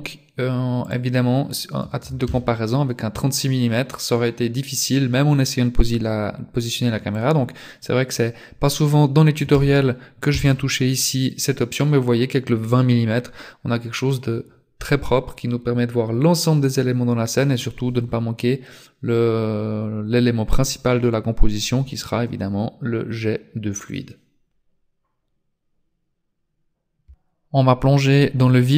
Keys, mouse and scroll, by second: 0.9 click, 7.1 click.